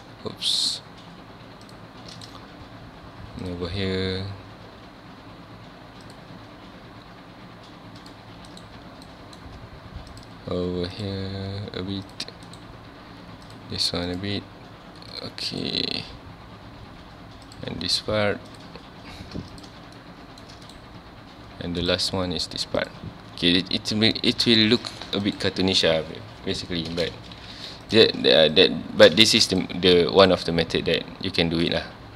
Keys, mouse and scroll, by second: 9.1-12.1 shift+middle drag, 20.0-23.0 shift+middle drag, 27.0 space, 27.4 3, 27.9 click, 28.5 shift+click, 29.3 ctrl+z, 29.5 shift+click, 29.9-31.6 shift+middle drag, 31.6 shift+click.